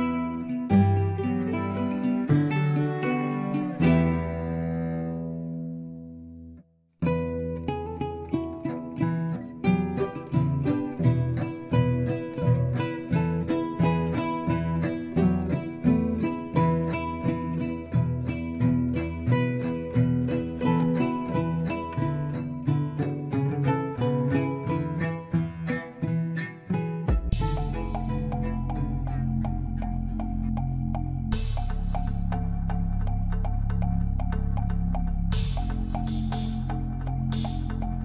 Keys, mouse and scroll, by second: 1.9 shift+s, 4.5 shift+a, 8.6-10.3 scroll down 5, 10.3 scroll down 1, 10.4 g, 11.5 scroll up 5, 11.8 shift+middle click, 12.2 g, 14.0 s, 14.7 scroll up 6, 15.0-15.9 shift+middle drag, 16.0 g, 17.2-18.1 scroll down 2, 18.5 g, 20.5 Tab, 20.7 middle click, 21.1 scroll down 1, 21.4 e, 22.9 scroll down 1, 23.2 scroll up 3, 23.3 middle click, 23.7 scroll up 1, 23.9 Tab, 24.0 middle click, 24.6 Tab, 24.8 Tab, 24.9 Tab, 25.0 click, 25.8 e, 27.0 e, 28.5 scroll down 3, 28.6 middle click, 29.2-29.8 scroll up 1, 29.8 middle click, 30.1 Tab, 31.9 scroll down 1, 32.0 Tab, 32.1-32.7 middle drag, 33.1 click, 33.8 scroll up 2, 33.9 Tab, 34.0 middle click, 34.2 Tab, 34.6 alt+shift+click, 35.4-35.8 scroll up 2, 35.8 shift+middle click, 36.3 ctrl+b.